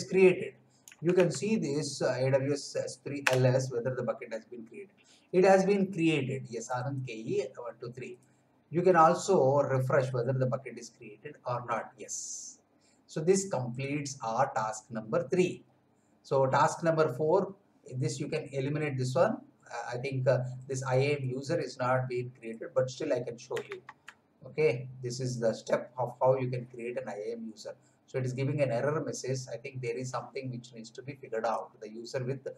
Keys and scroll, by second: 0.8 Up, 3.2 Return, 23.8 alt+Tab.